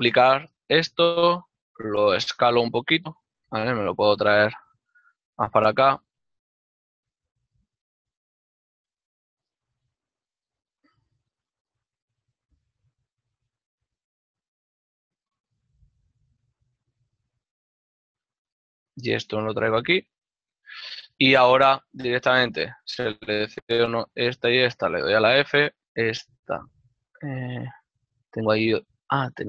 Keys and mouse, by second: 0.7 shift+d, 3.9 click, 7.7 g, 9.0 g, 9.7 click, 10.5 b, 11.3 middle click, 12.1 b, 12.4 middle click, 12.9 g, 14.5 click, 15.0 b, 15.7 middle click, 16.8 b, 17.2 middle click, 18.2 g, 21.6 ctrl+middle click, 24.5 ctrl+Tab, 26.5 shift+middle click, 27.0 f, 27.8 g, 28.4 right click.